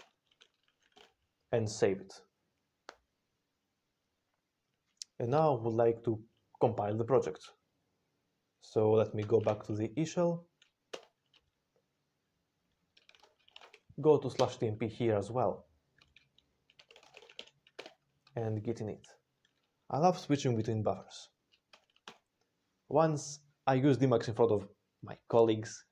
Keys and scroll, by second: 0.0-0.5 typing, 0.9 ctrl+x, 0.9 ctrl+s, 9.1 ctrl+x, 9.3 b, 10.8 Return, 12.7-14.1 typing, 14.2 Return, 16.4-17.8 typing, 21.6 ctrl+x, 21.9 b.